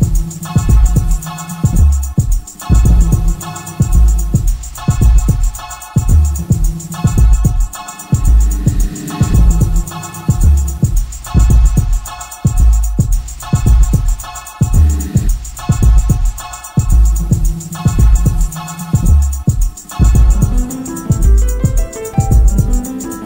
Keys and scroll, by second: 0.0 3, 0.3 ], 1.6 4, 3.7 4, 6.6 3, 7.6 ], 9.1 ], 12.0 4, 15.0 3, 16.7 4, 18.4 ], 19.1 4, 20.3 3, 21.2 ], 21.9 4.